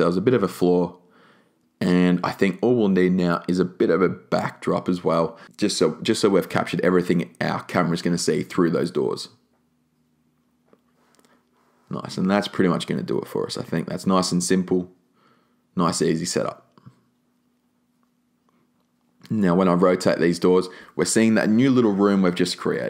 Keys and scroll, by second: 3.1 super+c, 3.2 super+v, 3.6 super+r, 5.4 shift+e, 14.6 r.